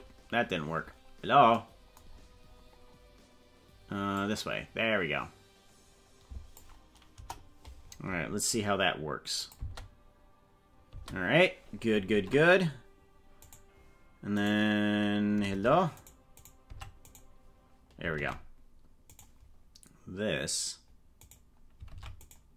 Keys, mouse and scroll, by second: 0.0 ctrl+z, 0.7-1.0 scroll down 4, 2.2-2.8 scroll down 9, 4.2-6.6 drag, 7.1 KP_0, 8.1-8.8 scroll up 7, 9.4 click, 9.6 space, 11.0 space, 12.1 ctrl+Tab, 13.4 right click, 14.4 right click, 15.5 ctrl+Tab, 16.4 right click, 16.7 Tab, 17.1 right click, 18.2 ctrl+Tab, 19.2 right click, 21.2 right click, 21.9 ctrl+Tab, 22.2 right click.